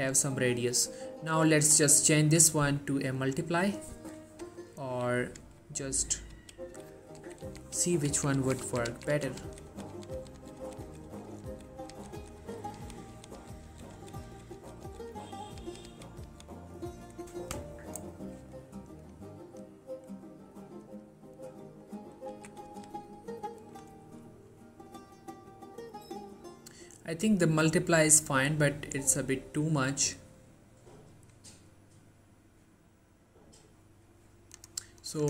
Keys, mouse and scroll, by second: 1.6 click, 5.5 Down, 7.3 Up, 9.5 Down, 19.2 click, 20.4-21.5 scroll up 1, 21.5 click, 22.4 Up, 22.8 Down, 27.4-34.9 drag.